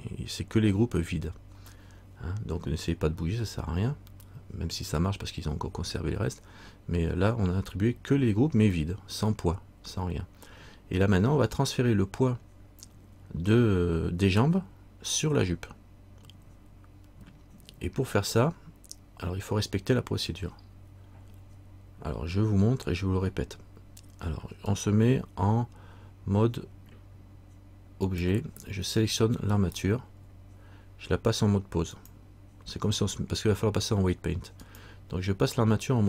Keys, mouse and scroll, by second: 24.8 click, 29.7 right click, 32.1 click.